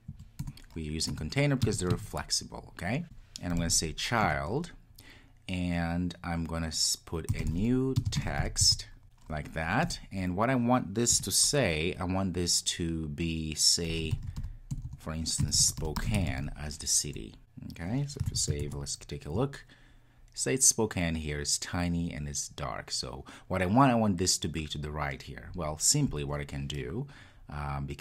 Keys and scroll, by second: 0.5 Return, 4.3 Return, 9.0 Return, 18.4 super+s.